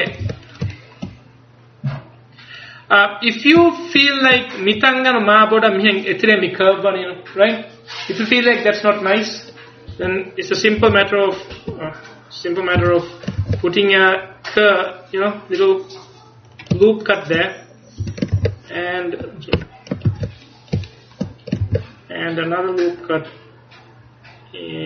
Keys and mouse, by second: 0.3 ctrl+s, 2.6 right click, 7.0-10.0 middle drag, 10.0 Tab, 10.9 r, 12.9 z, 13.5 ctrl+r, 18.1 a, 18.4 ctrl+r, 20.1 ctrl+z, 21.7 ctrl+r.